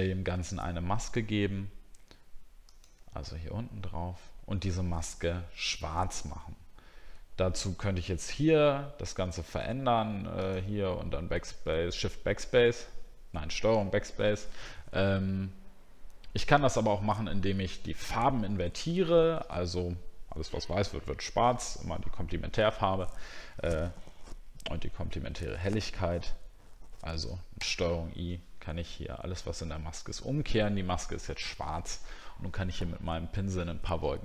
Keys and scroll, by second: 27.6 ctrl+i.